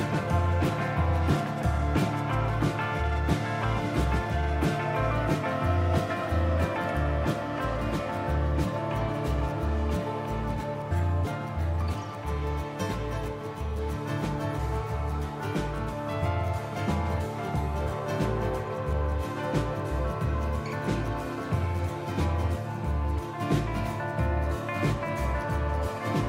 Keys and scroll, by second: 0.8-6.7 typing, 8.7 typing.